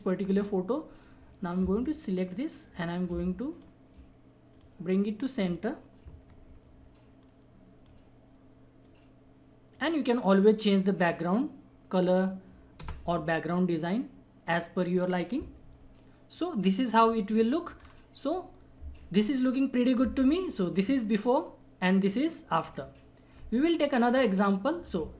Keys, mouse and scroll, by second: 1.7 ctrl+click, 3.5 ctrl+click, 6.3 ctrl+-, 7.2-11.0 drag, 11.3 click, 12.8 Return, 14.3 click, 15.6 ctrl+=, 17.0 ctrl+=, 17.7-19.7 scroll up 2, 20.8 scroll up 1, 21.0 alt+click, 21.1 alt+click.